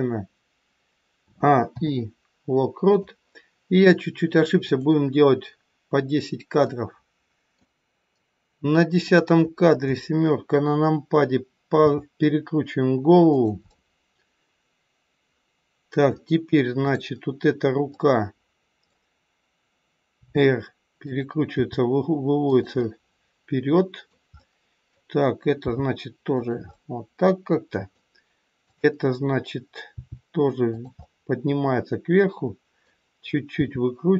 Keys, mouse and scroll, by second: 1.1 a, 1.6 i, 4.7 click, 6.7 middle click, 9.0 click, 9.8 KP_7, 11.7 r, 13.6 middle click, 16.8 click, 17.9 middle click, 20.1 r, 21.5 g, 22.7 middle click, 25.6 g, 26.6 scroll up 1, 26.7 middle click, 28.6 click, 29.9 g, 31.0 middle click, 33.5 r.